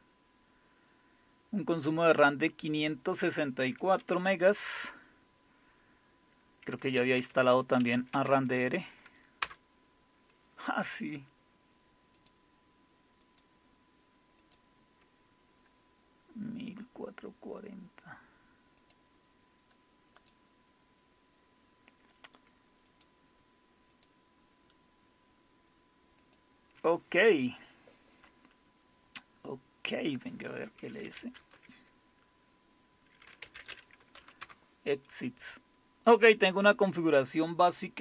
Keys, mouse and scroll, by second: 6.9-8.4 typing, 9.4 Return, 12.2 click, 13.2 click, 14.4 click, 18.8 click, 20.2 click, 22.9 click, 24.0 click, 26.2 click, 31.0-31.7 typing, 33.0-34.2 typing, 34.4 Return.